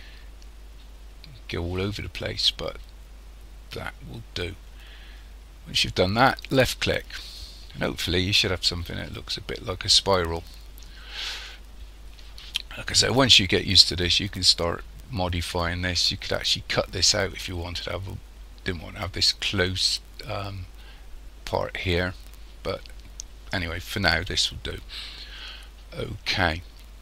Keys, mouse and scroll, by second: 7.4-8.2 scroll up 3, 8.2-9.1 scroll up 3, 9.1-10.5 scroll up 3, 10.5 scroll up 1, 10.7 scroll down 1, 12.4-13.7 scroll up 4, 24.7 scroll down 1.